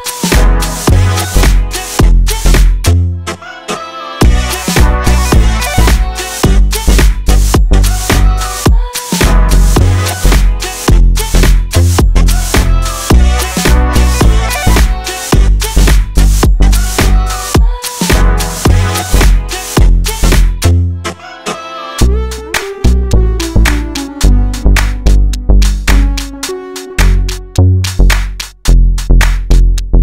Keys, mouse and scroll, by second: 0.3 scroll down 1, 0.6-1.1 shift+middle drag, 1.1 shift+a, 2.3 middle drag, 2.5-2.9 scroll up 1, 2.9-3.4 shift+middle drag, 3.4 click, 4.0 s, 4.5 middle drag, 4.7 scroll up 1, 5.0 s, 5.8 middle click, 6.1 click, 6.5-7.4 middle drag, 7.4 KP_1, 7.5-7.9 scroll up 3, 7.9 shift+middle click, 8.5 Tab, 8.9 1, 9.0 alt+z, 9.2 click, 9.4 click, 10.4 e, 11.9 r, 12.4 g, 13.9 shift+middle click, 14.3 g, 16.0 ctrl+z, 16.3 s, 17.0 shift+middle click, 17.6 scroll down 2, 17.9 Tab, 18.4 alt+z, 18.5 scroll down 1, 18.6 scroll up 1, 18.9-19.5 middle drag, 19.5 KP_1, 19.8 scroll up 1, 20.1 Tab, 21.0 alt+z, 21.3 click, 21.6 shift+middle click, 22.2 ctrl+x, 22.6 scroll down 1, 22.7 shift+middle click, 23.0 a, 24.0 click, 25.3 alt+z, 25.4 scroll down 2, 25.5 middle click, 26.0-26.6 scroll up 1, 26.6 Tab, 26.9-28.9 drag, 28.9 scroll down 1, 29.0 middle click, 29.6 Tab, 29.8-30.0 scroll up 4.